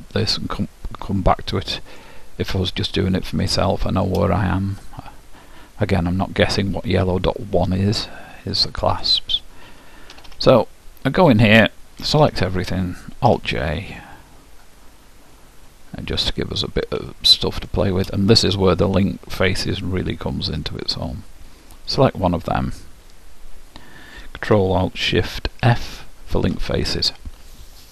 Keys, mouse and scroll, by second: 2.6-5.4 middle drag, 7.8-9.6 middle drag, 10.3 Tab, 12.1 a, 13.4 alt+j, 16.0-19.1 middle drag, 19.8-23.4 drag.